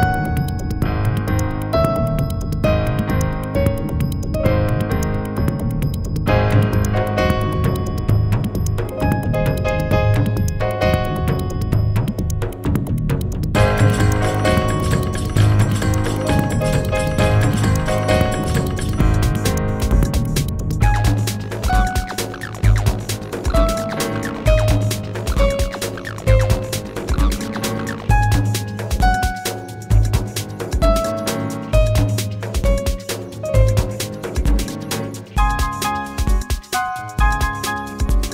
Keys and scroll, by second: 8.8 g, 10.3 w, 26.0 ctrl+z.